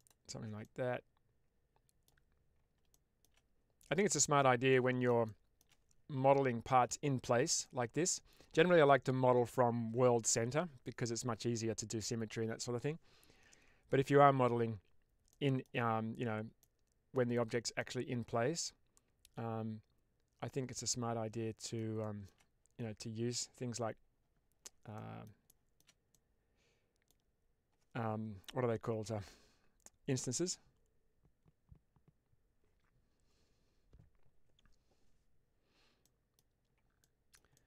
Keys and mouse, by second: 0.5-1.9 middle drag, 2.9 shift+middle click, 4.6 middle click, 5.1 shift+middle click, 7.5 middle click, 15.2 middle click, 16.5 middle click, 17.7-21.6 middle drag, 21.9 shift+middle click, 24.9 middle click, 25.5 shift+middle click, 26.0-27.1 middle drag, 35.9 middle click, 36.9 middle click, 37.4 shift+middle click.